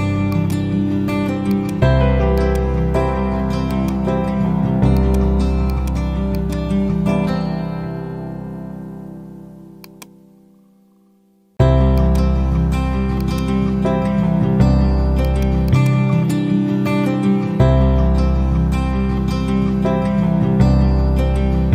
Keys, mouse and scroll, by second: 9.8-11.0 drag, 12.2 F4, 13.1 click, 16.3 shift+b, 18.4-19.9 typing, 20.3 Return, 21.1 shift+b.